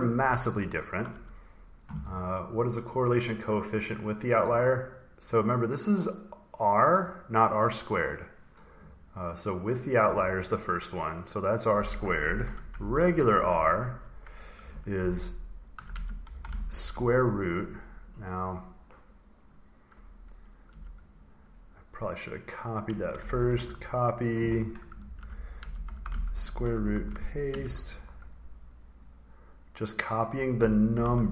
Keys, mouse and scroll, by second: 0.5-1.1 ctrl+scroll, 1.1-2.3 ctrl+scroll, 2.4 click, 4.0 click, 6.4 click, 9.6 click, 10.8 click, 11.2 click, 12.4-17.1 typing, 20.6 Escape, 21.0 click, 21.1 click, 22.7 click, 22.8 click, 23.4 ctrl+c, 23.9 click, 24.6-26.6 typing, 26.8 ctrl+v, 27.4 Return, 29.0 click, 29.1 click, 30.2 click, 30.8 ctrl+c.